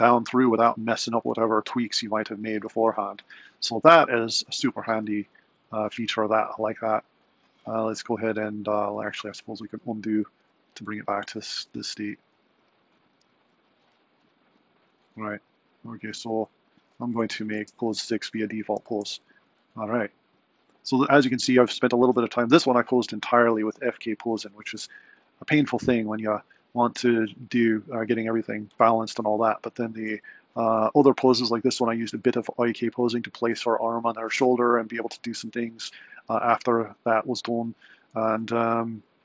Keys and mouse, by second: 9.4 super+z, 10.0 super+z, 10.6 super+z, 11.4 super+z, 11.8 super+z, 12.5 super+z, 12.8 super+z, 14.1 super+z, 14.6 super+z, 17.1 a, 17.5 i, 19.0 Left, 19.5 Left, 19.8 Left, 20.2 Left, 20.8 Left, 21.1 Right, 29.9 Right, 30.9 Right, 31.3 Left, 38.3 Left, 39.1 Right.